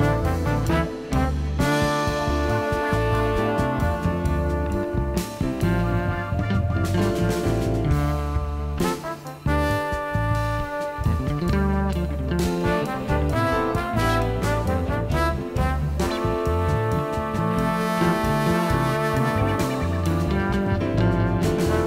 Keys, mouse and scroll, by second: 0.0 click, 1.4 click, 2.7-4.4 drag, 4.4 click, 5.3 click, 6.3-7.4 drag, 9.3 click, 10.5 click, 11.9 click, 12.8 click, 14.3 right click, 15.2-16.4 drag, 21.4 click.